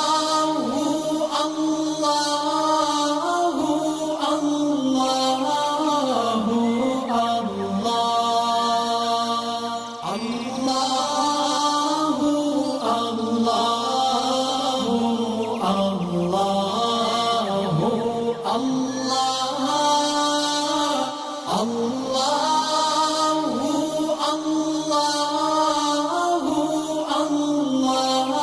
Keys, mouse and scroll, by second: 0.0 click, 0.0-3.2 drag, 4.7 alt+scroll down 1, 6.3 alt+scroll up 1, 6.8 alt+scroll down 1, 7.5 alt+scroll up 1, 8.0 click, 11.2-11.7 drag, 15.6 alt+scroll down 1, 16.3 alt+scroll up 1, 17.2 space, 17.3 click, 17.7 alt+scroll down 1, 19.4 alt+scroll down 1, 19.7 space, 19.7 click, 21.1 alt+scroll up 1, 22.8-24.5 drag.